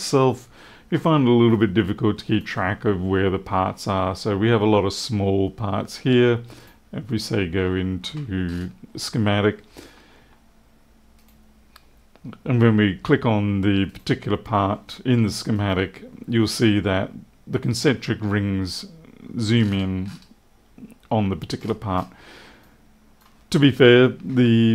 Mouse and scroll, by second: 1.4 click, 6.5 right click, 8.4 scroll up 1, 11.1 right click, 13.8 right click, 15.5 right click, 19.5 scroll down 1, 19.6-20.2 scroll up 2, 21.5-22.0 scroll down 3, 22.5 click.